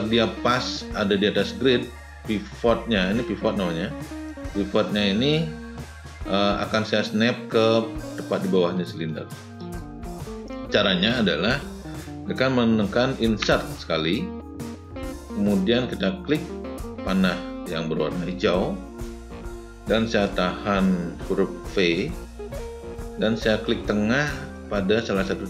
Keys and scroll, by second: 13.1 Insert, 21.8 v.